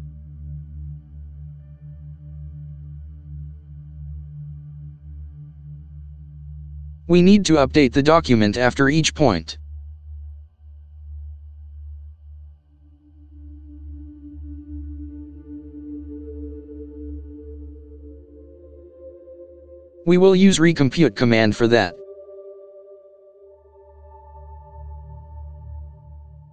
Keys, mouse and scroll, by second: 0.2 0, 1.0 shift+0, 3.1 ctrl+Return, 4.8 Tab, 8.7-9.1 typing, 11.7-13.8 typing, 14.2 Return, 15.3 shift+9, 17.8 typing, 19.0-22.1 typing, 24.7-26.5 typing.